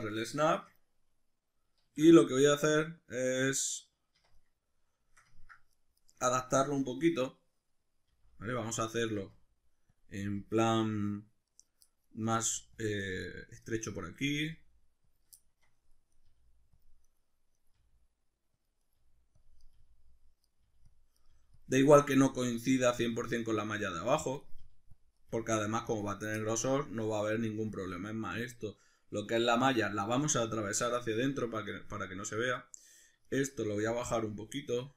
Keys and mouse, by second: 0.5 shift+Tab, 1.9 alt+q, 3.6 Escape, 4.2 1, 6.0 right click, 6.2-8.8 middle drag, 8.1 g, 8.8 click, 9.0 right click, 9.2 g, 10.0 click, 10.2 right click, 10.4 g, 11.6 right click, 11.9 middle click, 12.2 right click, 12.4 g, 12.8 click, 13.0 right click, 13.2 g, 13.6 click, 13.8 right click, 14.2 right click, 14.3 g, 15.1 click, 15.3 shift+middle click, 16.1 right click, 16.3 g, 16.8 click, 17.0 right click, 17.7 g, 18.7 click, 18.8 right click, 18.9 g, 19.5 click, 19.6 right click, 19.7 g, 20.2 click, 20.4 right click, 20.6 g, 20.9 click, 21.1 right click, 21.3 g, 21.6 click, 22.6-24.4 shift+middle drag, 24.4 right click, 24.6 g, 25.0 click, 25.2 right click, 25.3 g, 25.9 click, 26.4-32.8 middle drag, 32.8 right click, 33.2 shift+right click, 33.7 g.